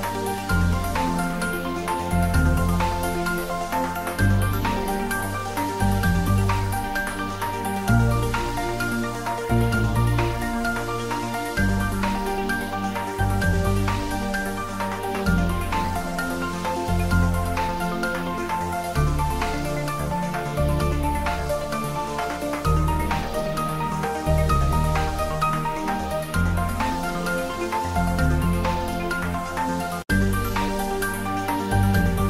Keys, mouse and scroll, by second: 0.5 click, 1.9 middle drag, 2.5 click, 3.7 Return, 5.3-7.2 drag, 18.7 click, 20.7 s, 21.6 click, 21.9 ctrl+s, 25.7 ctrl+s, 26.1 ctrl+middle drag, 27.1 ctrl+s, 27.3-27.6 shift+middle click, 28.0 click, 28.2-30.8 typing, 30.6-31.3 middle click, 31.6 Tab, 31.8 click.